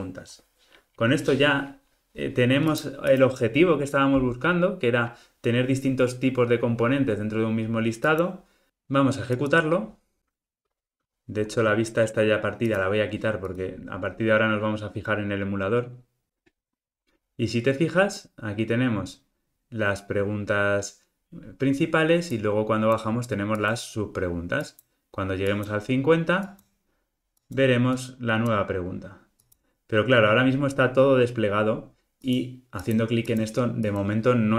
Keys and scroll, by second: 9.5 ctrl+r.